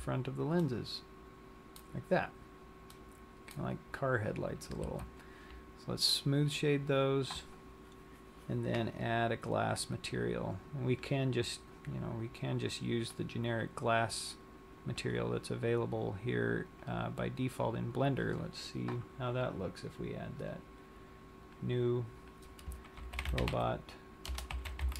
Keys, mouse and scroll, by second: 1.0 click, 1.0 middle click, 1.0 z, 2.3 scroll, 3.1 middle click, 4.0 scroll, 4.9 Tab, 6.4 click, 10.2 click, 15.0 click, 16.7 click, 20.4 click, 21.5 click, 23.0 click.